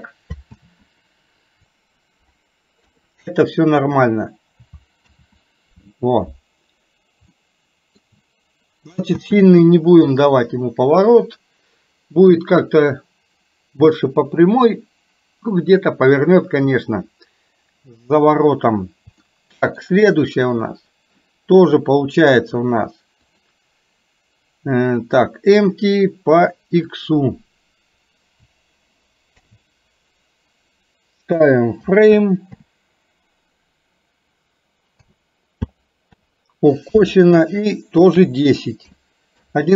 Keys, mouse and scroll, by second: 0.7 ctrl+z, 2.9 KP_3, 5.2 ctrl+z, 7.3 shift+middle click, 9.1 space, 19.3-19.8 shift+middle drag, 23.4 click, 27.0-39.5 drag.